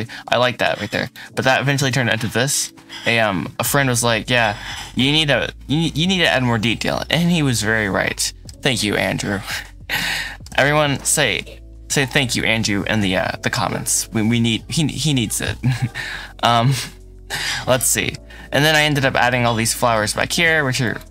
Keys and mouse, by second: 0.9 click, 1.6 KP_Decimal, 2.5-4.2 middle drag, 5.0-8.3 middle drag, 9.1 middle click, 10.4 middle click, 11.3 middle click, 12.8 KP_Decimal, 16.1 middle click, 17.4 middle click, 18.6-19.3 middle drag, 19.3-19.6 shift+drag, 20.8 click.